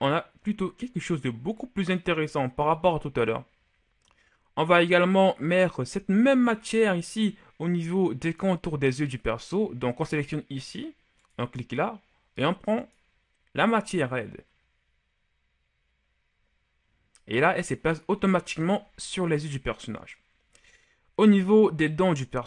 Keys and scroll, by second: 18.7 a.